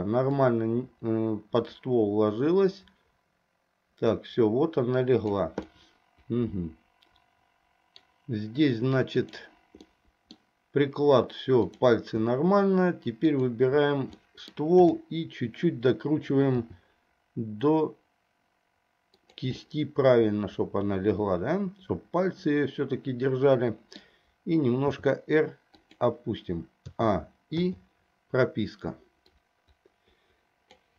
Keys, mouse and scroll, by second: 0.5-5.5 drag, 5.9-8.1 middle drag, 9.3 click, 9.9 middle click, 13.4 shift+click, 14.3 middle click, 15.0 KP_7, 16.7 r, 19.8-24.2 middle drag, 25.0 r, 27.0 a, 27.8 i, 29.4-30.9 drag.